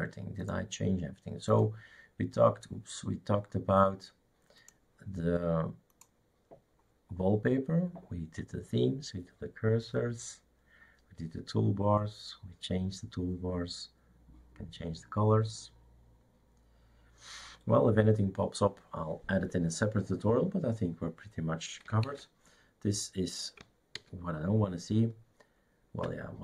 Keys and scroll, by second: 22.1 shift+super+q, 24.0 alt+t.